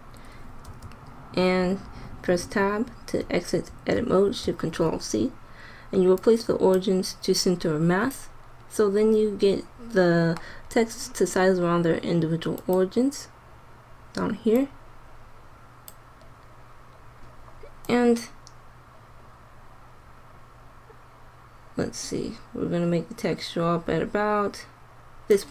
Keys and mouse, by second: 0.6 Tab, 4.4 ctrl+alt+shift+c, 12.6 click, 17.9 click.